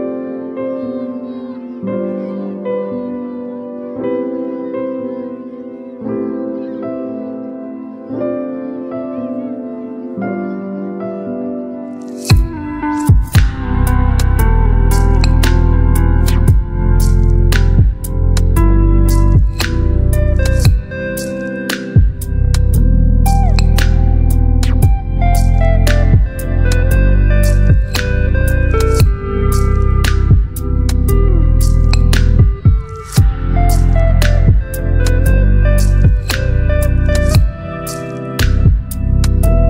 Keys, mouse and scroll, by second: 1.5 click, 4.4-6.2 shift+drag, 6.8-9.2 alt+drag, 15.5 click, 17.4-17.9 scroll down 1, 23.3 click, 27.3 ctrl+t, 29.1 right click, 30.4 click, 33.1-34.8 shift+drag, 37.1-39.6 alt+drag.